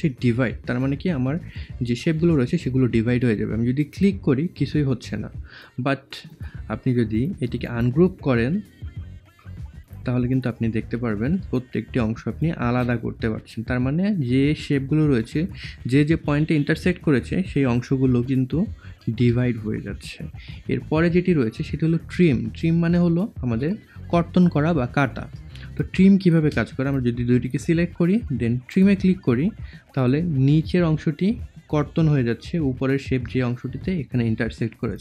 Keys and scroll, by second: 18.1 ctrl+z.